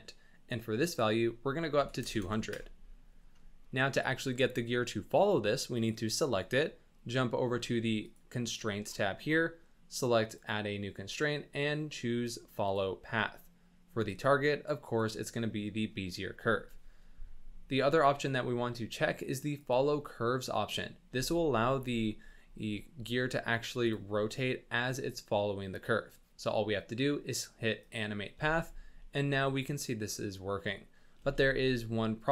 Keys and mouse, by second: 0.9-2.5 drag, 2.2 KP_0, 5.8 click, 10.3-12.7 drag, 13.9-15.0 drag, 19.6 click, 21.1 space, 21.8 space, 23.8 click, 28.4 space, 31.2 space.